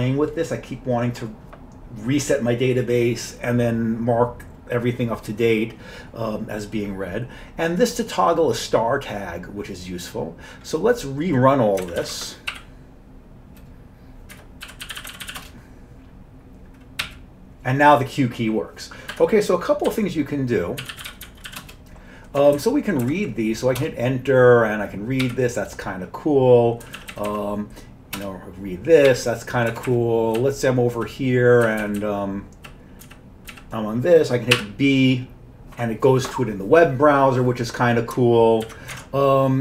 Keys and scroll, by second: 11.9 ctrl+c, 12.0 ctrl+c, 12.5 y, 14.4 Escape, 14.5-15.8 typing, 17.0 q, 19.1 Escape, 19.7-22.0 typing, 22.4 Down, 22.6 Down, 23.1 Up, 23.8 Return, 25.3-33.5 typing, 28.2 Return, 31.7 Down, 33.5 Down, 34.6 typing, 38.7 ctrl+w, 39.0 alt+Tab.